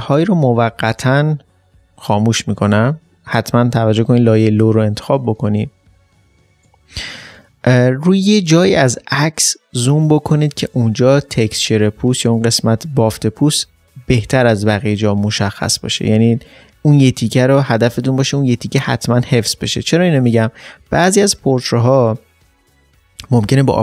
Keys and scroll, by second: 6.1 typing.